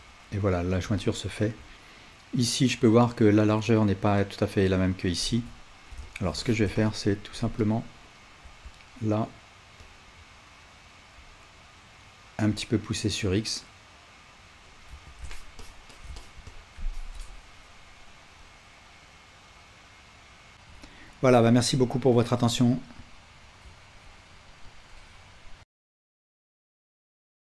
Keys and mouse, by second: 5.4 Tab, 15.1 Tab, 20.5-25.7 ctrl+alt+right drag.